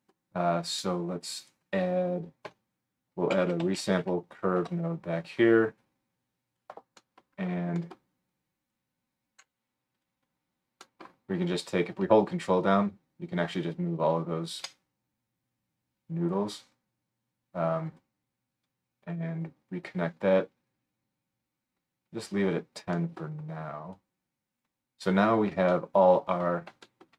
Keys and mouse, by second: 1.5-8.3 right drag, 2.5 F3, 9.4 g, 10.0-12.6 drag, 16.4-27.1 middle drag.